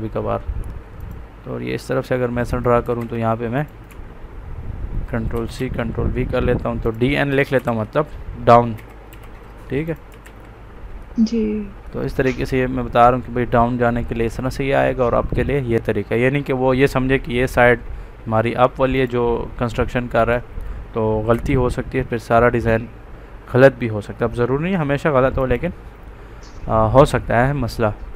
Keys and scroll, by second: 2.7 Escape, 5.2 ctrl+c, 5.5 ctrl+v, 7.6 ctrl+a, 8.7 d, 9.0 n, 11.3 ctrl+c, 21.2 Escape.